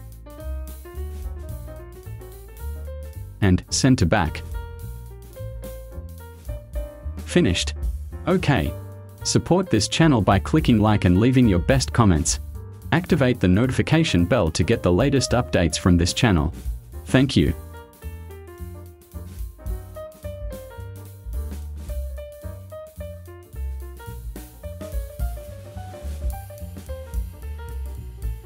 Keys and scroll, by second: 4.6 ctrl+shift+[.